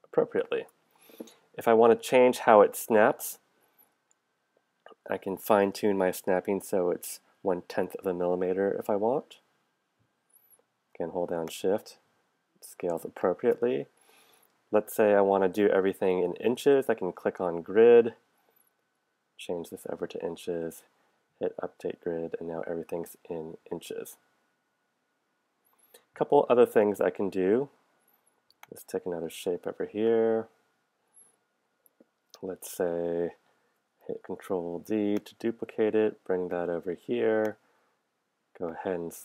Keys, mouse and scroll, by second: 3.9 click, 7.5 click, 11.5 shift+click, 12.3 shift+click, 13.2 shift+click, 17.2 click, 28.6-30.2 drag, 34.3 ctrl+d, 35.2-36.6 drag, 37.5-38.8 drag.